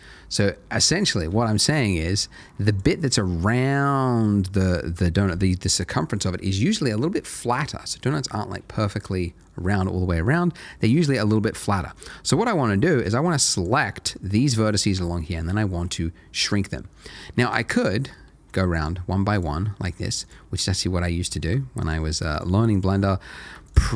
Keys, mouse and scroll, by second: 2.7 click, 3.9 middle click, 10.6 middle click, 13.0 click, 13.9 middle click, 17.8 shift+click, 18.1 shift+middle click, 18.2 click, 18.7 shift+click, 19.7 middle click, 20.2 shift+click, 21.1 middle click, 21.8 shift+click, 23.1 middle click, 23.6 shift+click.